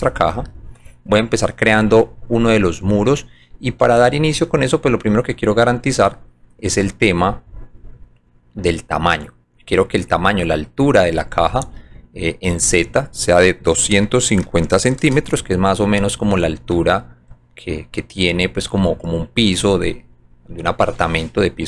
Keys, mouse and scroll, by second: 3.7-5.7 alt+drag, 6.2 alt+middle click, 7.8 alt+click, 8.7-9.9 alt+drag, 12.6 click, 13.5-15.0 typing, 16.7-18.8 alt+drag, 21.1-21.6 alt+drag.